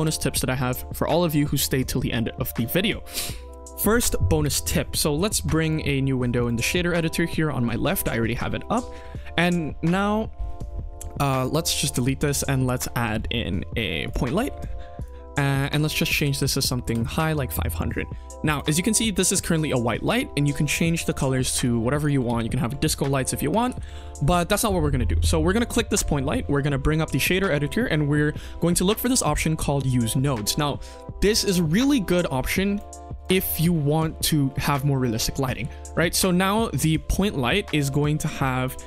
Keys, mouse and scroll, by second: 5.6 click, 6.3 click, 11.3 click, 11.8 x, 12.2 shift+a, 14.3 g, 15.5-16.8 drag, 16.3 KP_0, 17.5-17.8 scroll up 1, 17.9 shift+middle click, 18.4 click, 18.7 scroll up 1, 19.0 shift+middle drag, 19.3-20.0 scroll down 2, 20.0 click, 21.9 click, 22.2 ctrl+z, 23.4 click, 23.7 ctrl+s, 25.5 click, 32.7 click, 33.1 click, 33.3 scroll up 1, 33.5 scroll down 1, 33.6-34.1 middle drag, 35.3 click, 35.6 middle drag, 36.2 click, 36.7 middle drag, 37.5-37.8 middle drag, 38.2-38.7 drag.